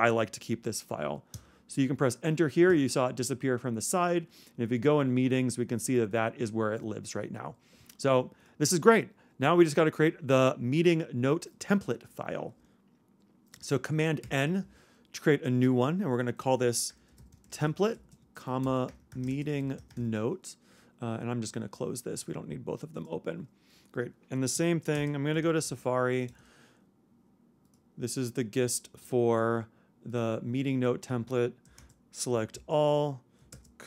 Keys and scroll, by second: 14.2 super+n, 16.7-20.3 typing, 24.9 super+space, 25.3 super+s, 31.8 super+a, 32.5 super+c, 33.5 super+space.